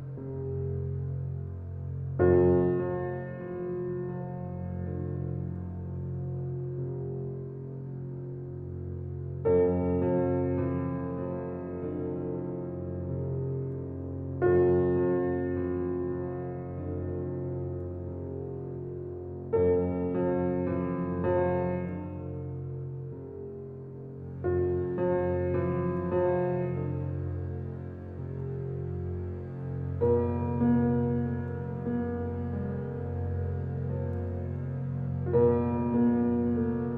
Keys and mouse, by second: 2.0 Escape, 3.3-6.6 drag, 3.3 typing, 6.6 alt+middle click, 7.4-7.9 typing, 11.4 ctrl+click, 12.4 click, 13.3-13.7 typing, 16.2-16.9 typing, 17.1-18.1 alt+drag, 18.0-18.5 typing, 22.8-24.3 ctrl+drag, 24.6 typing, 27.1-27.8 typing, 29.7-30.5 ctrl+alt+drag, 31.4 click, 31.5 typing, 33.2-35.0 ctrl+alt+drag, 35.5 ctrl+alt+click, 36.0 ctrl+alt+shift+click.